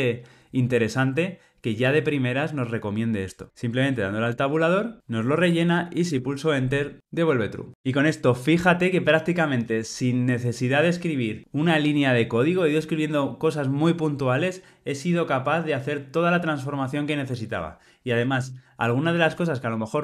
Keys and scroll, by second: 4.1 Tab, 7.0 Tab.